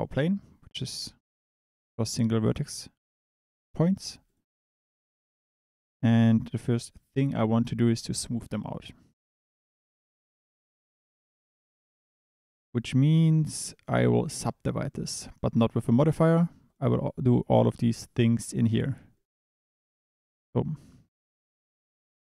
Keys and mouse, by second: 1.0 Tab, 1.8 click, 5.2 click, 6.2 Tab, 15.8 click, 19.5 click.